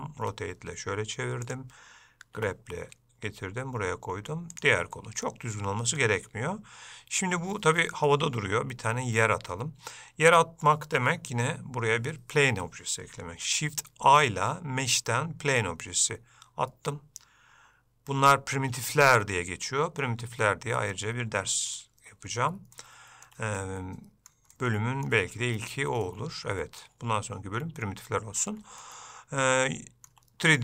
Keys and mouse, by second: 5.4 middle click, 8.3 middle click, 14.2 shift+a, 22.9 shift+middle click, 23.8 middle click, 24.7 shift+middle click, 26.2 middle click, 29.0-30.3 shift+middle drag.